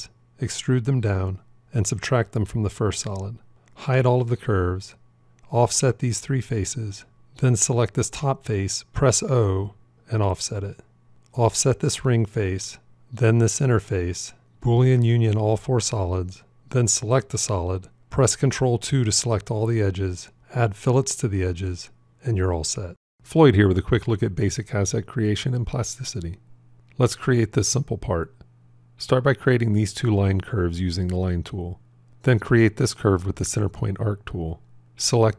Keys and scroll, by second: 9.3 o, 15.7 q, 19.2 ctrl+2.